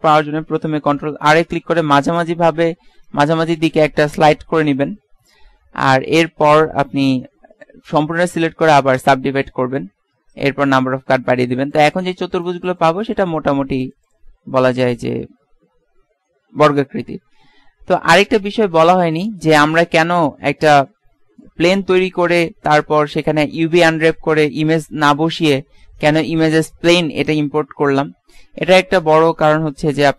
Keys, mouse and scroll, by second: 1.0 ctrl+r, 6.2 a, 7.8 a, 8.3 w, 12.4-16.2 drag, 18.2 `, 18.7 `, 18.9 Tab, 19.9-20.4 scroll down 1, 20.4-20.8 scroll up 1, 21.2 middle click, 22.2 shift+a, 29.9 KP_1.